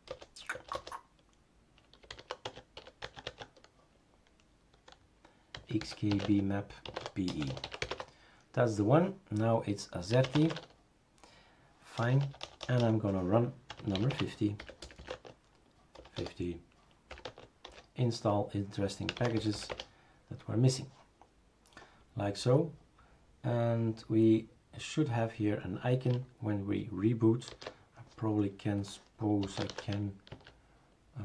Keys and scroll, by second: 0.1 BackSpace, 0.5 BackSpace, 0.7 BackSpace, 1.8-3.3 typing, 5.3-8.1 typing, 9.9-10.9 typing, 12.0 BackSpace, 12.2 BackSpace, 12.4 BackSpace, 12.6 BackSpace, 13.7-17.6 typing, 17.7 Return, 18.9-20.0 typing, 27.5 shift+super+d, 29.2-30.3 typing.